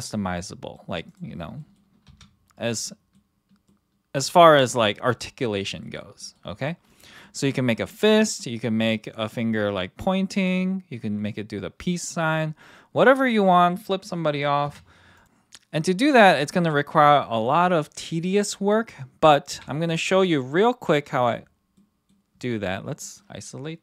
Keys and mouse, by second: 0.3-0.7 middle drag, 1.0 click, 1.5 middle drag, 2.0 r, 2.8-3.1 middle drag, 3.6-4.2 middle drag, 4.4 middle drag, 5.8 middle drag, 6.2 middle drag, 6.5 click, 6.9 click, 7.2 middle click, 14.7 KP_1, 15.1 drag, 19.5 KP_3, 21.8-22.1 middle drag, 22.5 click, 23.0 middle drag.